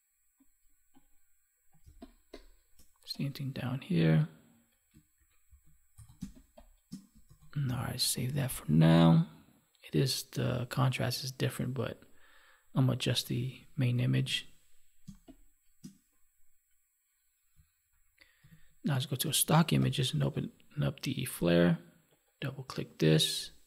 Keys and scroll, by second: 1.7 space, 5.1 ctrl+1, 6.1 space, 7.2 ctrl+s, 14.1 ctrl+s, 14.9 space, 18.5 alt+Tab.